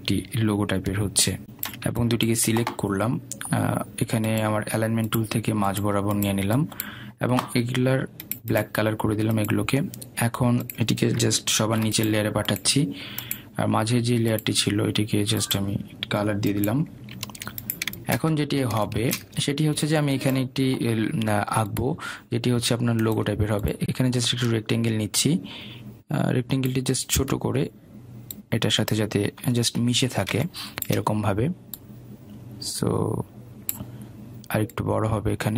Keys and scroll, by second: 0.0 Delete.